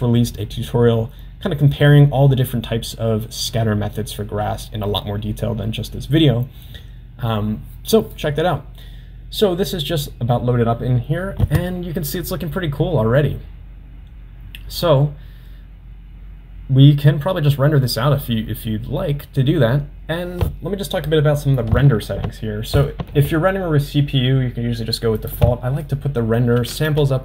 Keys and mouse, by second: 25.2-27.2 drag, 26.9 0.